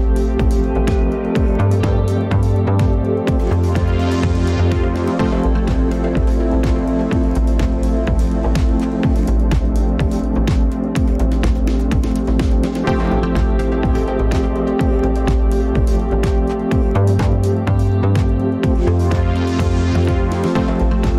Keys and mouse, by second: 3.3-4.7 middle drag, 5.2 shift+a.